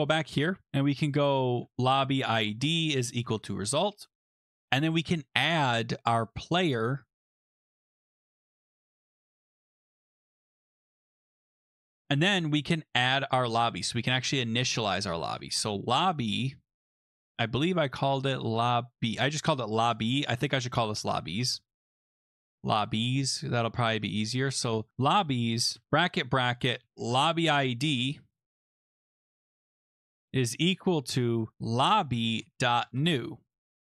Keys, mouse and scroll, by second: 0.8-4.8 typing, 1.7-3.7 drag, 7.1-7.5 scroll, 8.7 click, 14.8-16.0 typing, 17.9-18.3 scroll, 20.0 click, 20.1 click, 20.7-22.2 typing, 23.0-23.5 scroll, 24.4 click, 24.5 click, 24.9-33.8 typing.